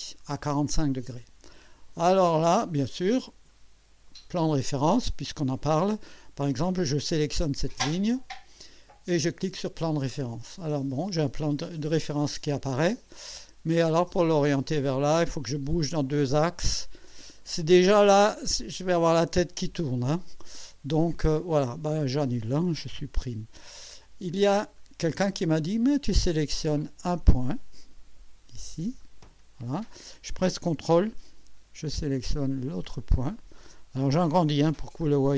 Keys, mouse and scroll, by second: 0.6 click, 1.8 scroll up 1, 2.3-3.2 drag, 3.5 click, 7.9 click, 9.4 click, 12.2-13.6 drag, 21.2 click, 22.2 click, 23.1 Delete, 24.2 scroll up 2, 24.8-25.7 right drag, 29.0 click, 33.3 ctrl+click, 34.8 alt+scroll up 2.